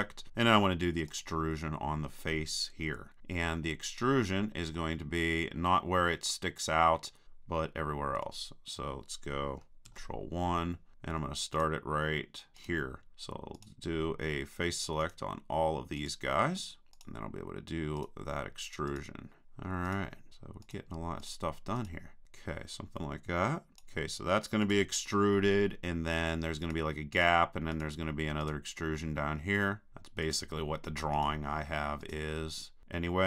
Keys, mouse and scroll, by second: 1.1-3.0 drag, 3.2-4.8 middle drag, 8.2 KP_3, 9.9 ctrl+KP_1, 11.5-26.4 right drag, 26.6-33.2 right drag.